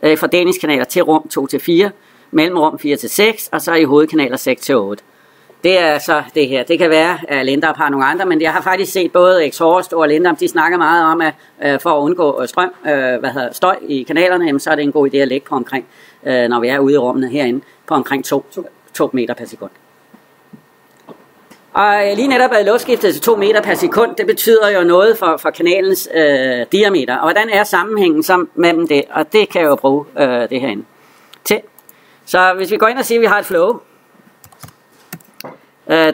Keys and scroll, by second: 28.5 alt+Tab.